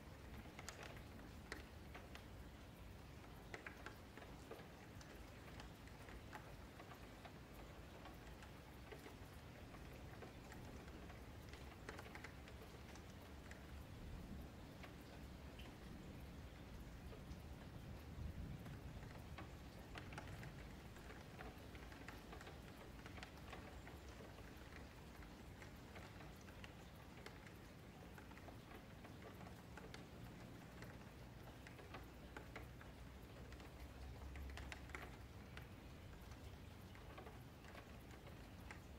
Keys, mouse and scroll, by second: 0.4-3.5 middle drag, 5.6 middle click, 6.3 ctrl+z, 6.6 ctrl+z, 6.8-7.4 ctrl+z, 8.7 1, 8.9 click, 10.1 click, 11.4-12.7 middle drag, 12.7 click, 14.4-17.8 middle drag, 17.8 click, 18.6 click, 19.7-21.2 middle drag, 21.2 click, 22.0-26.0 middle drag, 26.0 click, 27.0-28.1 middle drag, 28.1 click, 28.8-30.4 middle drag, 30.4 click, 31.3 middle click, 32.1 3, 32.3 click, 33.2 shift+d, 34.1 click, 38.1-38.9 shift+middle drag.